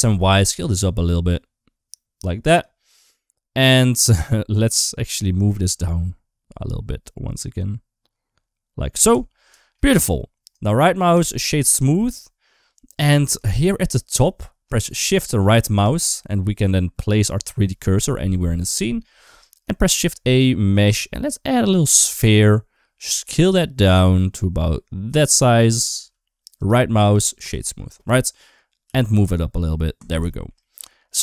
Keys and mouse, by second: 2.6 middle click, 4.3 Tab, 5.4 g, 8.9 Tab, 9.4 shift+middle click, 9.6 middle click, 10.5 right click, 11.3 shift+middle click, 12.1 shift+middle click, 13.3 shift+middle click, 15.6 shift+right click, 16.9-19.2 shift+right drag, 19.7 shift+a, 24.8 s, 25.8 s, 26.8 right click, 27.6 middle click, 28.7 g, 30.1 shift+middle click, 30.4 middle click.